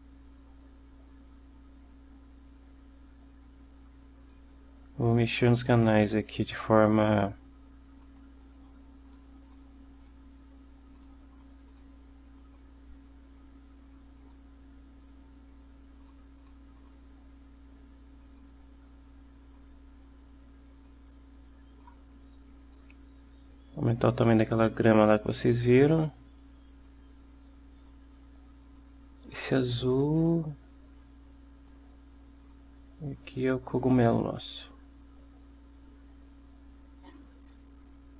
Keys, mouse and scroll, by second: 4.3 click, 5.7 click, 8.2-8.7 drag, 9.0 click, 9.2 click, 9.6 click, 10.1 click, 11.0 click, 11.4 click, 11.8 click, 12.5 click, 14.3 click, 16.1 click, 16.5 click, 16.9 click, 18.3 click, 19.5 click, 21.0-22.1 drag, 22.8-24.8 drag, 25.1 click, 25.9 click, 27.0-28.2 drag, 28.7 click, 30.3 click, 31.1 click, 32.5 click, 33.2 click, 34.7-38.1 drag.